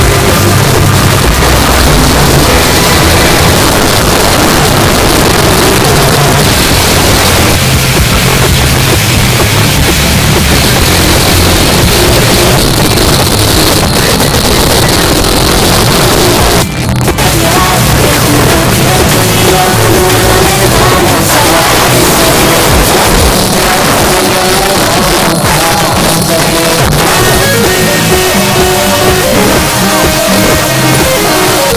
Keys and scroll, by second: 3.5 Page_Down, 12.5 Page_Down, 23.2 Page_Down.